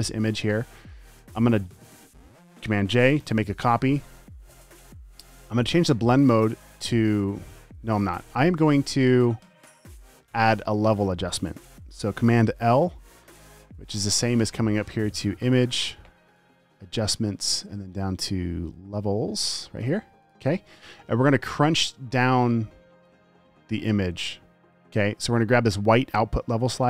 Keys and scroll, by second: 3.2 super+j, 13.1 super+l.